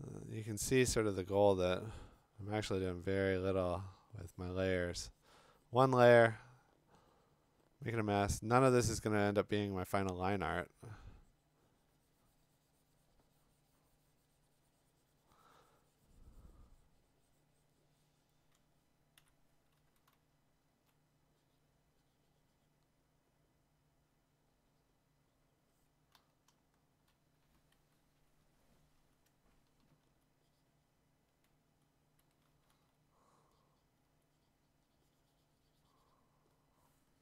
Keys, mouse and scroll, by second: 0.5-0.9 click, 0.9 click, 1.2 click, 19.2 x, 20.1-20.8 [, 26.1 ], 26.5-27.1 ], 30.2 alt+click, 32.2 c, 32.8 c, 34.0 x.